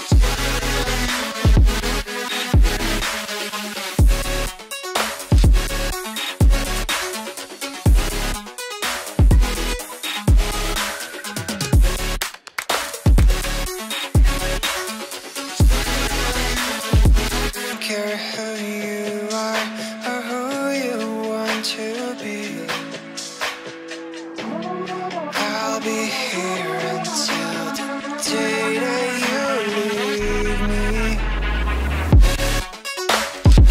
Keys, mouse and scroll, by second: 5.9 space, 8.7 space, 9.9 ctrl+click, 11.0 shift+Page_Down, 13.6 double click, 14.0 ctrl+z, 14.5 F2, 23.3 right click, 27.9-28.3 scroll down 1, 28.8 ctrl+click, 30.9 double click.